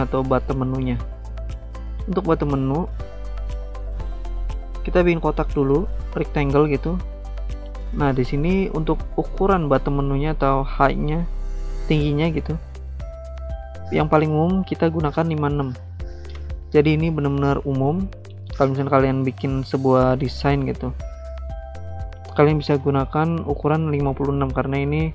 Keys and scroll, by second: 15.3-16.1 typing, 16.4 Return.